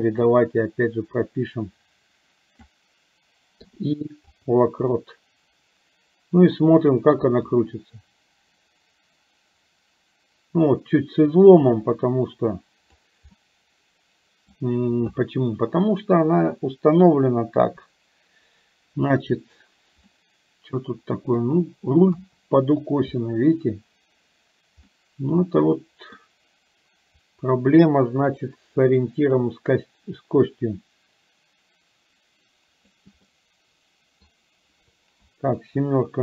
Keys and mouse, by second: 0.3-2.8 drag, 4.9-6.6 middle drag, 7.6-13.1 drag, 13.4-14.5 middle drag, 17.6 KP_7, 20.3-21.5 middle drag, 22.1 KP_3, 25.0-26.3 middle drag, 27.4-33.1 drag, 33.3-34.3 middle drag, 35.3 KP_7.